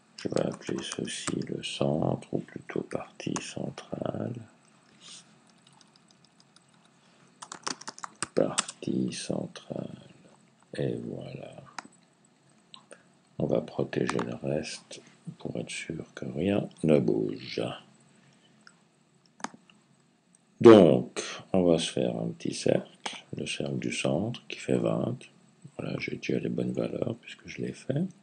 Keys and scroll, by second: 0.0-1.6 typing, 2.7-3.2 typing, 4.3-9.0 typing, 5.3 Left.